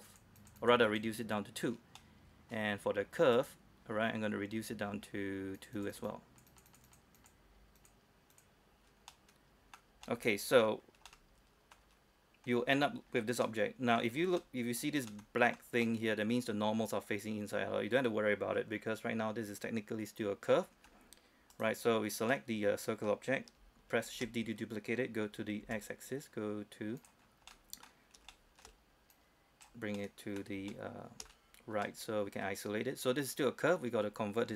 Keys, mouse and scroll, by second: 2.2 middle click, 3.6 right click, 5.8 click, 9.3 middle click, 9.9-10.3 scroll down 1, 10.3 middle click, 10.5-11.0 scroll up 1, 11.0-11.3 scroll down 1, 11.3 middle click, 11.5-11.9 scroll up 1, 12.1-12.7 scroll up 1, 12.8 scroll down 1, 13.0-13.3 scroll up 1, 13.3 scroll down 1, 13.6 middle click, 14.1 scroll up 1, 14.6 middle click, 15.7-16.0 scroll up 1, 16.0 middle click, 17.4-18.0 scroll up 1, 18.0-19.8 scroll up 1, 20.7-21.1 scroll down 1, 21.1-21.7 scroll up 1, 21.7 right click, 22.5 middle click, 24.3 shift+d, 25.8 x, 27.2 click, 27.4-27.7 scroll down 1, 27.7 middle click, 28.5 shift+middle click, 29.3 click, 30.2 middle click, 30.6 scroll down 1, 30.9-32.9 shift+middle drag, 32.9-33.4 scroll up 1, 33.4-33.9 scroll down 1.